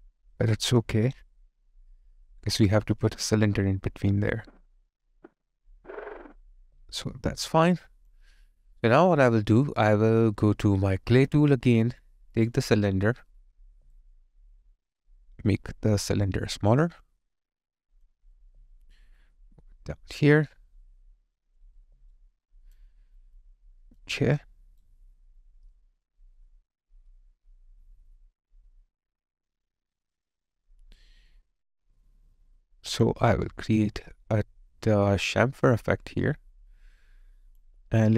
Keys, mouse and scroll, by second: 1.0 space, 6.6 alt+click, 13.7 alt+right click, 14.2 alt+middle click, 18.4 alt+click, 21.8 alt+right click, 22.4 alt+click, 23.0 alt+right click, 23.4 alt+click, 24.4 alt+right click, 25.2 alt+middle click, 25.6 alt+right click.